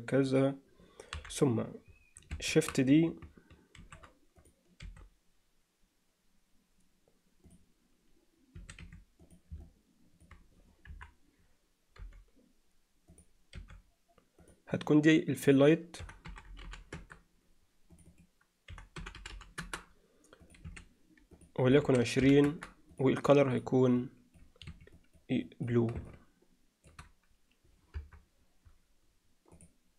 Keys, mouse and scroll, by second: 1.2 KP_7, 3.8 shift+d, 4.9 r, 8.6 s, 9.7-10.3 middle drag, 10.9 KP_1, 12.0 g, 13.6 r, 15.6-17.5 drag, 17.5 l, 18.1-19.9 drag, 19.3 l, 20.5-22.7 drag, 28.0 KP_0, 29.7-29.9 drag.